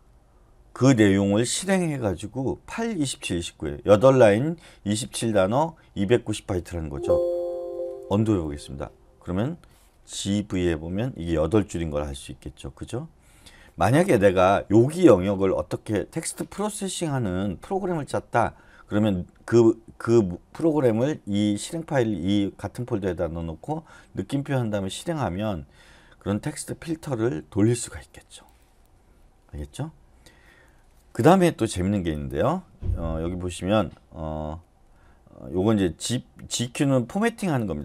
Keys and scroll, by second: 7.5 Escape, 7.9 u, 10.2-10.5 typing.